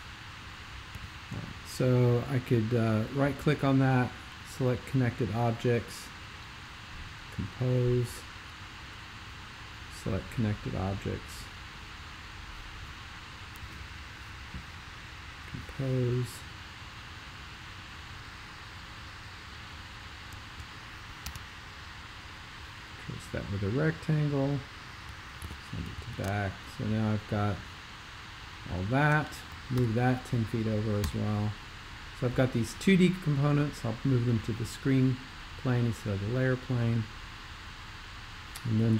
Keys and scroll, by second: 0.9 x, 21.3 4, 25.5 super+b, 25.9 x, 29.8 super+m, 31.0 Return.